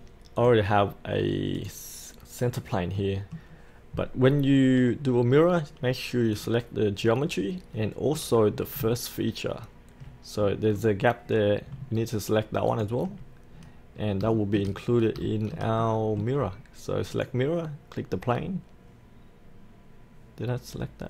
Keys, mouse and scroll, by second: 0.4 click, 2.6-2.9 scroll up 1, 2.9 middle click, 3.5-5.5 scroll down 1, 5.5-6.3 scroll up 1, 6.3 click, 7.1-7.7 scroll up 1, 7.7 middle click, 10.4-11.7 scroll down 1, 12.7 ctrl+click, 13.5-14.2 scroll up 1, 14.4 shift+middle click, 14.8-15.1 scroll up 1, 15.2-16.8 shift+middle drag, 17.1 click.